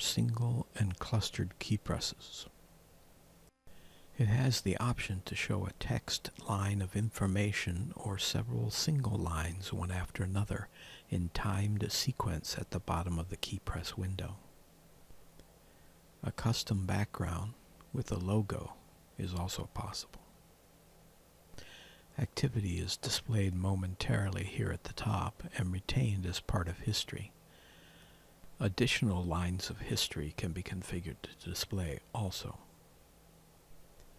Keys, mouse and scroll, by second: 3.7 click, 15.3 click, 21.7 click.